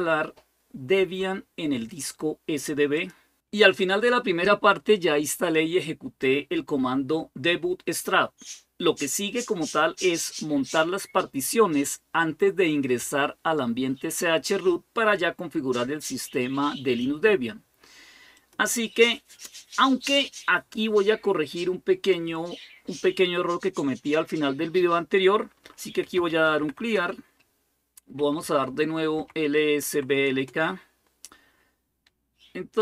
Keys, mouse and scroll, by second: 18.2-23.3 drag, 25.6-30.3 typing, 32.7-32.8 scroll down 1.